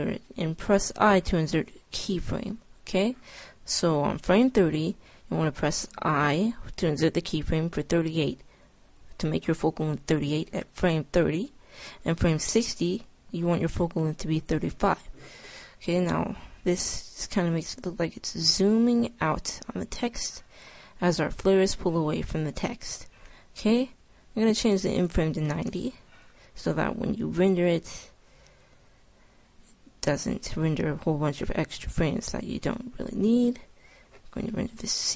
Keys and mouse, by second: 16.6-18.1 drag, 24.8-26.7 drag, 27.2-29.0 drag.